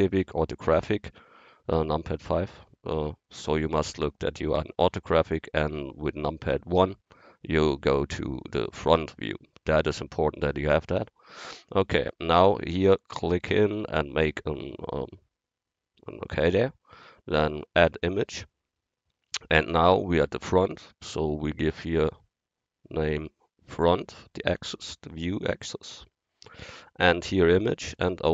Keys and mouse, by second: 0.3 KP_5, 6.8 KP_1, 17.9-19.9 drag, 21.6-23.6 drag.